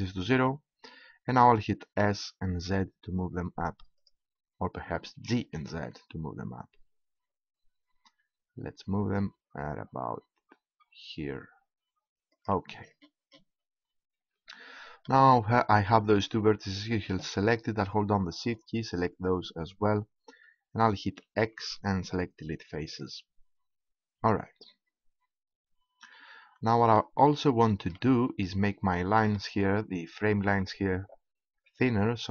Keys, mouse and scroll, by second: 3.1 s, 4.1-5.1 drag, 5.1 g, 5.7-7.1 drag, 12.7-14.8 drag, 16.1 middle click, 18.4-19.6 right drag, 21.4 x, 24.8 click, 25.2-28.9 middle drag, 31.6 middle click.